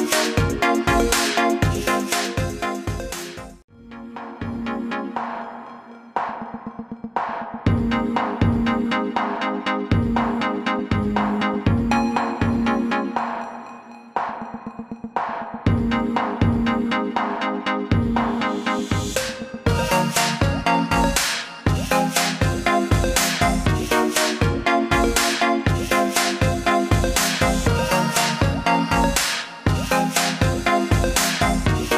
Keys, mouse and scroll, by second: 1.6 click, 6.0 click, 10.3 i, 11.7 click, 14.2 click, 17.3 alt+scroll down 1, 17.8 click, 20.3-21.4 alt+scroll down 2, 23.5 click, 28.0-28.6 scroll down 1, 28.6-29.9 scroll up 1, 29.9 click.